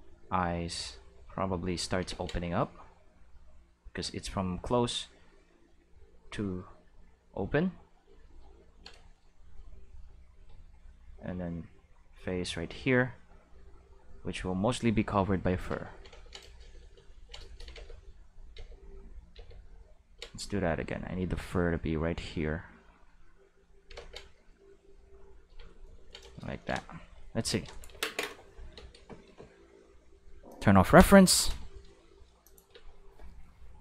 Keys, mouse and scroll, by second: 0.7 click, 2.1 ctrl+z, 2.8 click, 5.7-6.9 drag, 7.5 click, 10.8 shift+middle click, 11.3-12.6 drag, 13.3-15.5 drag, 17.8 ctrl+z, 18.6 ctrl+z, 19.4 ctrl+z, 20.6-22.1 drag, 23.1 click, 24.0 ctrl+z, 24.8 click, 25.7-27.1 ctrl+middle drag, 27.2 click, 27.5 space, 28.0 q, 28.8 space, 30.5 click, 32.4 click, 32.7 space.